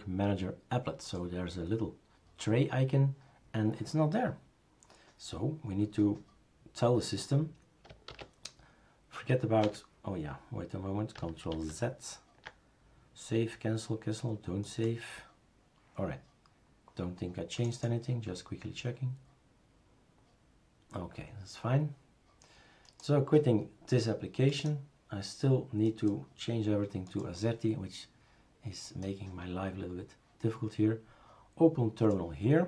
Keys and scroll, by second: 8.1 super+s, 9.6 Escape, 11.5 ctrl+w.